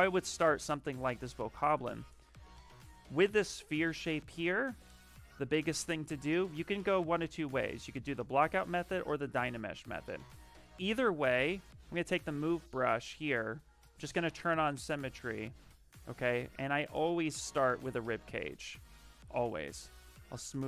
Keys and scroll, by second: 2.4 ,, 3.4 shift+f, 6.2 s, 7.8-8.7 typing, 10.1-12.8 typing, 17.4 s.